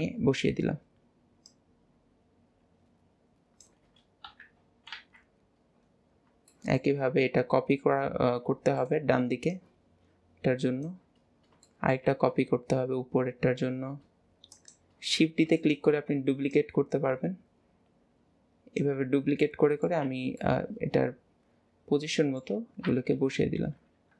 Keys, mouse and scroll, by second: 0.1 KP_Decimal, 0.8 scroll down 1, 1.5 click, 4.3 KP_3, 5.0 alt+z, 5.4-5.9 scroll down 3, 5.9 scroll up 1, 6.0 scroll down 1, 6.6-8.5 shift+middle drag, 9.5 click, 11.2-11.7 scroll down 2, 11.7 shift+middle click, 16.6 click, 19.1 scroll down 2, 19.5-20.1 middle drag, 20.4-23.2 middle drag.